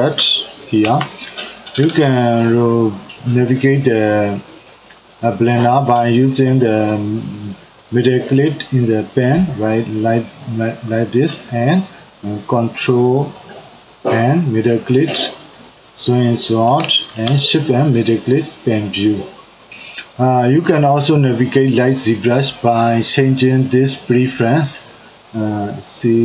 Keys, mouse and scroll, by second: 0.9 n, 8.9-11.9 middle drag, 13.3-16.3 ctrl+middle drag, 17.4-19.7 shift+middle drag, 23.7-26.2 drag.